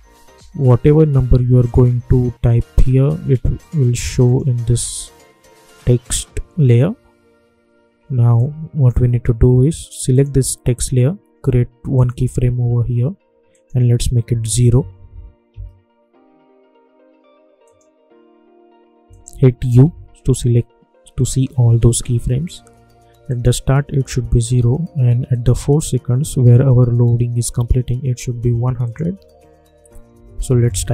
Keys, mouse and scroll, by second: 0.6-4.2 drag, 8.3-10.1 drag, 15.4 Return, 17.6 click, 19.7 u, 23.2 u, 25.3 click, 26.3 k, 28.8 click.